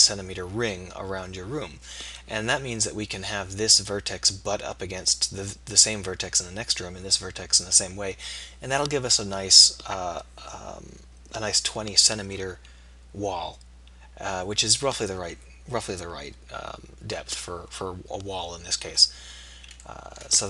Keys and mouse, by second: 1.6-19.9 middle drag.